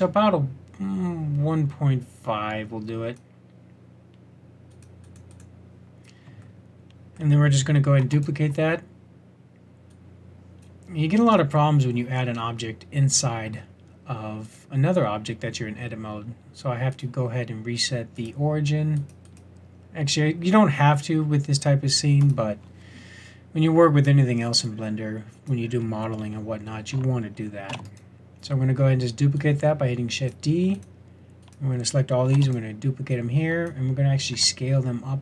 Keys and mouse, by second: 4.7-6.5 drag, 7.3 click, 8.0 shift+d, 27.6 shift+d, 32.3 shift+d, 34.3 s.